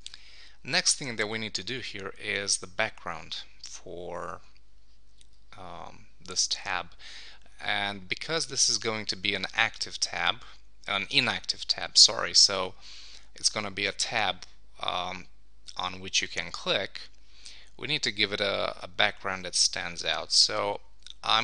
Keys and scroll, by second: 0.1 super+s.